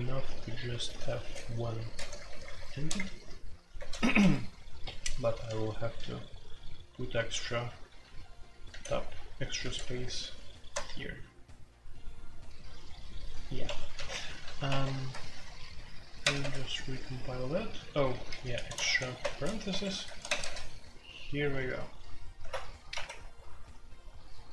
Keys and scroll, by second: 0.0-5.8 typing, 7.3 ctrl+d, 7.8 ctrl+d, 8.6 ctrl+d, 9.6 ctrl+d, 10.7 Tab, 13.6 Escape, 13.9-14.4 typing, 14.6 Escape, 14.8 F2, 16.2 ctrl+c, 16.4 ctrl+c, 17.7-19.2 typing, 19.7 Escape, 20.2 ctrl+c, 22.4 alt+2, 22.7-23.4 typing.